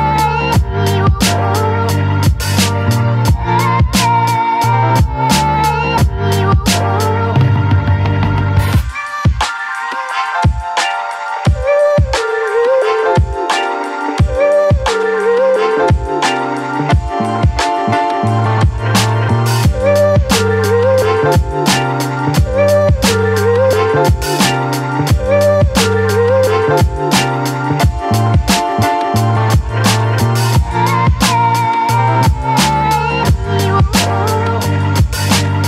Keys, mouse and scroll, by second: 0.5-2.0 ctrl+drag, 2.0 ctrl+h, 2.6 space, 2.8 click, 3.1 space, 3.6-6.0 ctrl+drag, 8.8-20.1 drag, 20.1 ctrl+a, 20.7 ctrl+c, 21.3 click, 23.8 ctrl+v, 26.0 right click, 27.5 click, 28.7 ctrl+t, 30.5-35.6 alt+drag.